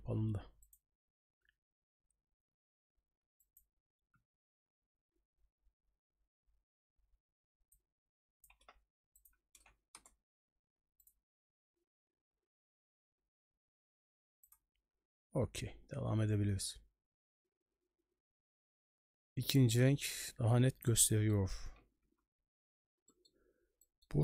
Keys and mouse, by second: 21.1 middle click, 22.4 j, 23.1 middle click, 23.9 middle click.